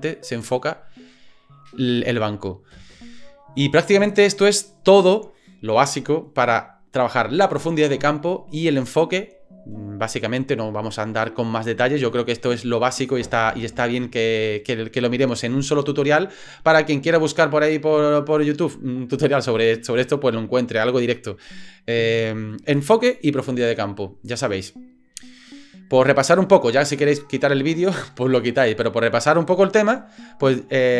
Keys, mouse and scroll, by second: 2.8 space, 29.7 click.